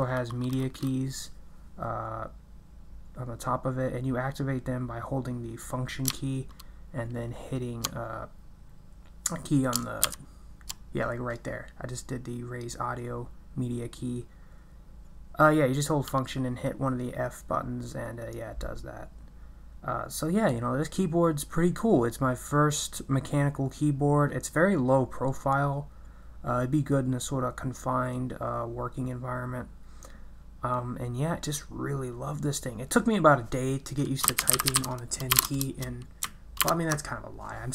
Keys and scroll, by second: 34.0-35.8 typing, 36.6 ctrl+BackSpace.